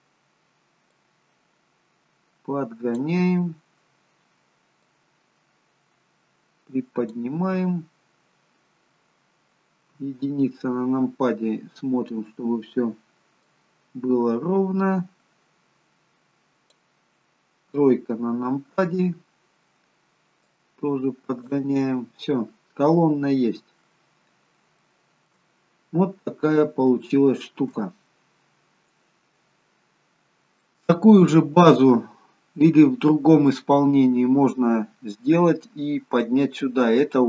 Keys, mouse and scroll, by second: 0.9 click, 3.3-3.8 scroll down 3, 4.8 click, 7.4 middle click, 9.8 KP_1, 12.1-12.9 scroll up 2, 12.9-13.3 scroll up 2, 13.3 click, 17.6 KP_3, 20.4 click, 21.9-22.8 scroll down 8, 22.8 middle click, 24.8 shift+middle click, 25.9 scroll up 5, 26.2-26.8 scroll down 2, 26.9 shift+middle click, 28.4-29.2 scroll down 1, 29.2-29.7 scroll down 1, 29.7 scroll up 2, 30.5 middle click, 34.3-35.9 scroll down 1.